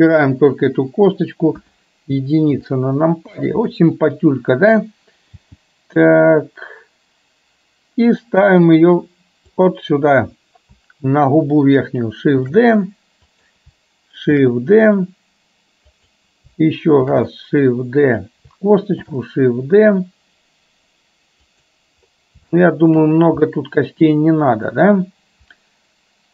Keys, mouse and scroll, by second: 1.6 KP_1, 2.8 shift+middle click, 12.5 shift+d, 22.6 shift+middle click, 23.5 middle click.